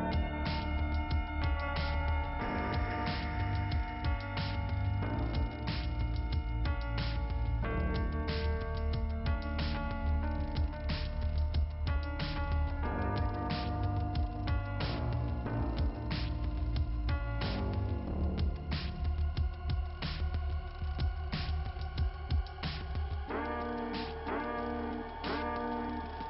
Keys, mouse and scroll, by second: 1.4 scroll up 2, 3.6 middle click, 4.4 scroll down 1, 5.9 scroll down 1, 7.8 scroll up 1, 9.2 scroll down 1, 10.4 click, 12.9 scroll up 2, 16.6 click, 17.6 click, 18.9 scroll down 2, 19.7 middle click, 20.9 click, 22.1 click, 23.2 click, 24.1 right click, 25.0 click, 25.3 click.